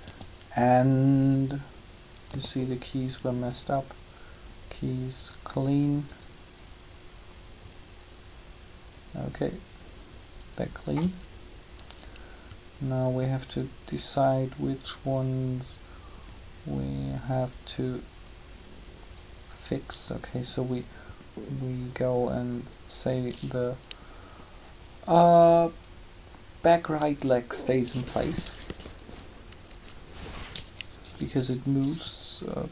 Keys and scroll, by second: 2.3 a, 28.7 Up.